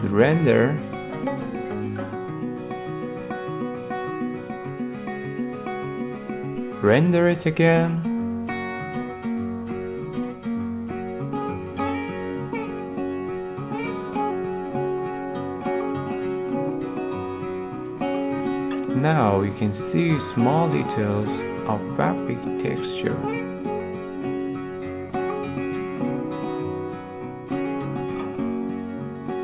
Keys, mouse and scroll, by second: 1.8 click, 2.4 scroll, 3.9-4.9 middle drag, 4.9 middle click, 5.7-6.9 drag, 7.6-8.8 drag, 14.2 middle click, 14.8 middle click, 18.4-19.5 middle drag, 21.7-23.6 middle drag, 28.8-29.4 middle drag.